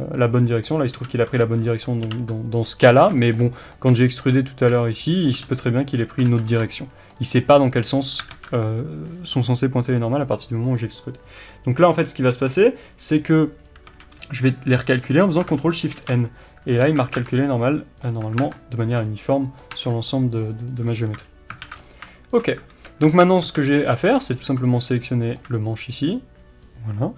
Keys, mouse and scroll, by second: 0.5-4.6 middle drag, 1.3 b, 2.6 x, 4.6 click, 5.5 e, 6.1 click, 6.3 ctrl+z, 6.9-27.1 middle drag, 8.3 alt+a, 13.9 a, 15.9 ctrl+shift+n, 16.8 alt+a, 17.2 Tab, 17.2 scroll down 1, 18.2 Tab, 19.8 Tab, 19.9 scroll down 1, 21.1 KP_3, 21.6 alt+a, 21.7-22.1 scroll up 1, 22.7 alt+a, 23.1 alt+z, 23.9 b, 24.2-24.7 scroll down 1.